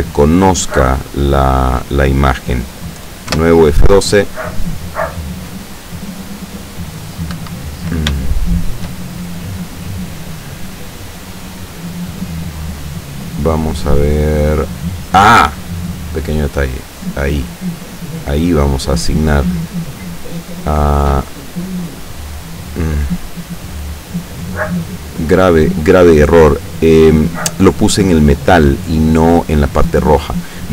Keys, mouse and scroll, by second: 3.4 F12, 7.4 Escape, 8.4 shift+click, 9.8 click, 15.7 click, 17.0 click, 18.2 click, 21.2 click, 24.8 click, 25.3 click, 29.9 click, 30.3 click.